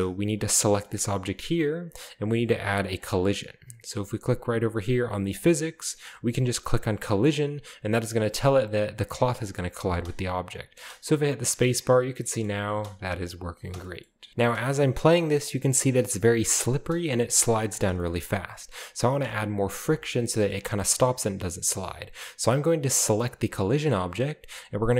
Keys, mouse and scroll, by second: 0.5 typing, 0.9 right click, 5.4 click, 8.4 click, 9.9 space, 11.1-11.5 drag, 12.0 drag, 12.5 middle click, 12.7-15.4 typing, 13.1 click, 13.8-14.3 scroll down 1, 14.1 shift+middle click, 14.6 shift+scroll up 1, 15.6 click, 16.8-17.2 middle drag, 16.8 typing, 17.2-17.7 drag, 18.0-19.7 shift+scroll up 1, 18.1-19.4 shift+middle drag, 20.1-21.9 scroll up 1, 21.9-22.7 right drag.